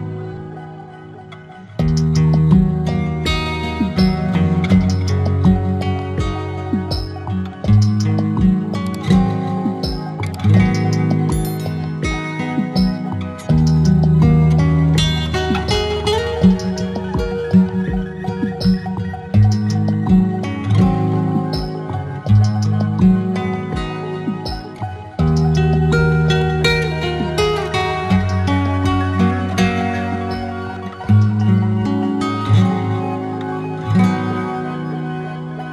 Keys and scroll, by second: 10.9 ctrl+alt+z, 33.0 alt+shift+e.